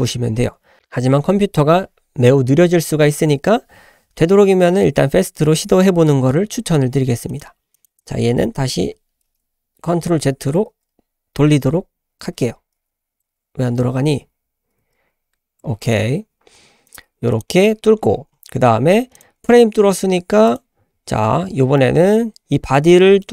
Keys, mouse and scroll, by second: 7.3-7.8 drag, 8.8 ctrl+z, 9.6 ctrl+z, 11.0 ctrl+z, 11.3 ctrl+z, 12.2 ctrl+z, 12.7 ctrl+z, 13.7 ctrl+z, 14.4 ctrl+z, 15.1 ctrl+z, 15.8 click, 16.8 click, 17.5-18.7 scroll down 4, 18.7 scroll up 2, 19.1 click, 20.5 click, 21.4-21.7 scroll down 1, 21.7-22.2 middle drag, 22.5 `, 23.2-23.3 middle drag.